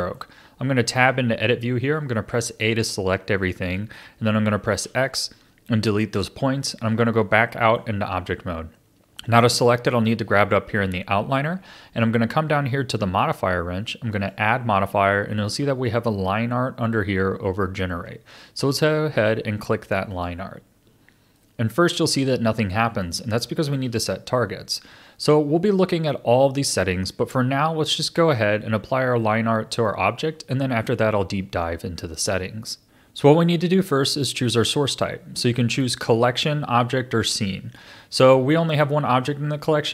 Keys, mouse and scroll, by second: 0.8 Tab, 2.3 a, 4.7 x, 6.5 Tab, 7.5-9.9 middle drag, 9.9 click, 12.0 click, 14.1-17.2 drag, 21.3-26.4 middle drag, 29.8-32.8 middle drag, 35.7-38.7 drag.